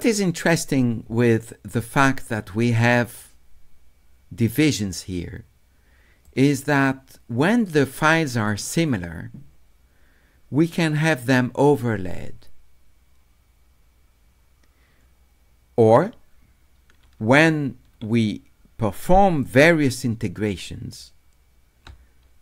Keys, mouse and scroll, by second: 2.3-6.3 drag, 18.9 d, 19.5-21.0 right drag.